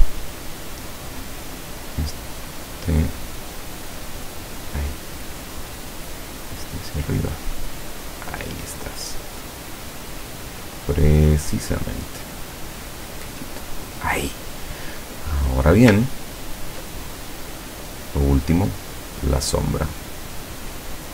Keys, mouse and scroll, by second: 1.6 click, 2.7-5.0 drag, 5.9-7.4 drag, 9.5-11.8 drag, 12.4-14.2 drag, 15.5 click, 16.1-16.7 ctrl+scroll down 4, 18.7 click.